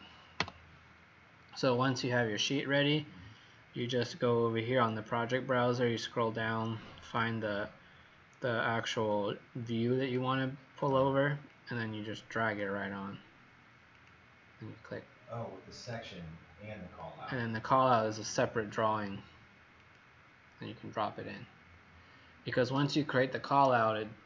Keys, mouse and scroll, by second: 0.3 Delete, 1.7 click, 11.5 click, 13.9 click.